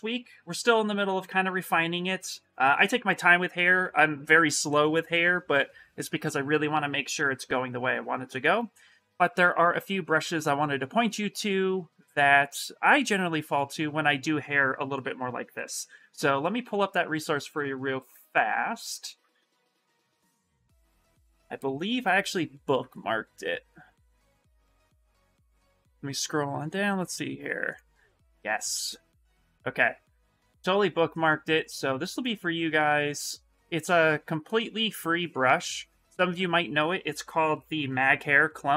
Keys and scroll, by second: 20.0 g, 21.0 Return.